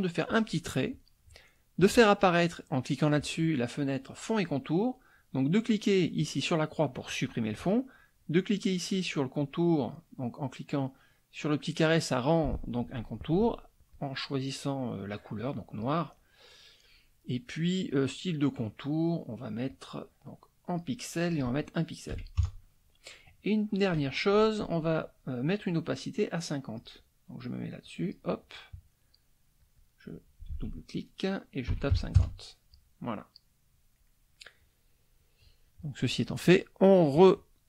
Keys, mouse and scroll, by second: 0.2 click, 1.8 click, 6.2 click, 7.6 click, 9.4 click, 13.9-16.0 drag, 17.9 click, 19.7-21.0 drag, 21.3 click, 22.1 KP_1, 26.7 click, 27.8 click, 29.6 click, 30.5 ctrl+a, 31.7 KP_5, 31.9 KP_0, 32.2 KP_Enter, 34.4 click, 35.1 click, 37.1 click.